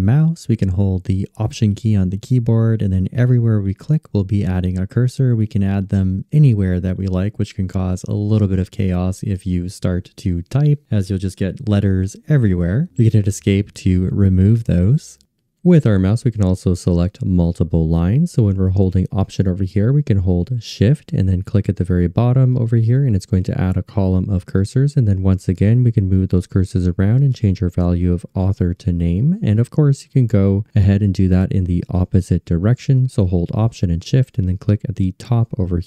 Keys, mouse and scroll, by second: 2.9-11.2 alt+drag, 12.9 Escape, 21.2 alt+shift+click, 23.6-26.4 alt+shift+drag, 28.1 alt+shift+click, 28.7-30.1 alt+shift+drag, 30.2 alt+shift+click, 34.4 alt+shift+click, 35.2-35.8 alt+shift+drag.